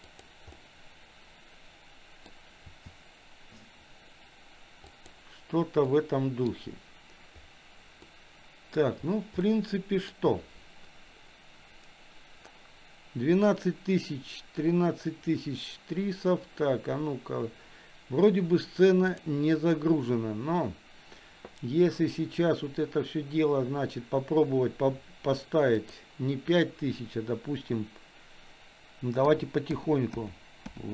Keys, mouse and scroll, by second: 0.7-2.5 middle drag, 2.8 r, 6.0 middle click, 8.2-9.1 middle drag, 9.6-10.5 shift+middle drag, 19.1 click, 26.3-30.9 drag.